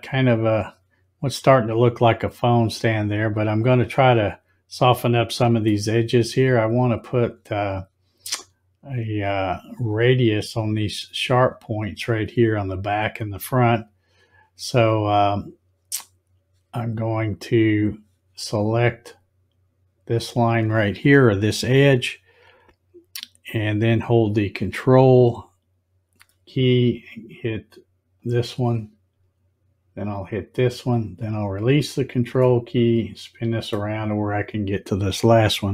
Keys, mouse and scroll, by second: 5.6-6.7 scroll down 1, 6.6 click, 20.1 click, 28.1 ctrl+click, 30.1 ctrl+click, 32.4-33.7 scroll up 1.